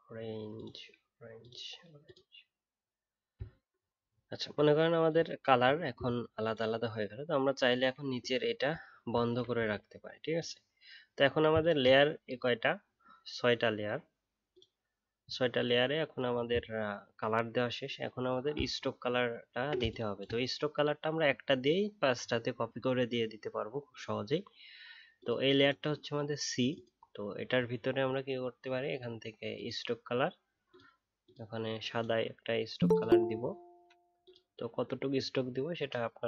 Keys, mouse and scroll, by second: 3.3 alt+scroll down 1, 4.0 alt+scroll down 1, 4.3-4.8 alt+scroll up 1, 8.7 alt+scroll down 1, 18.6 alt+scroll up 1, 19.2 alt+scroll down 1.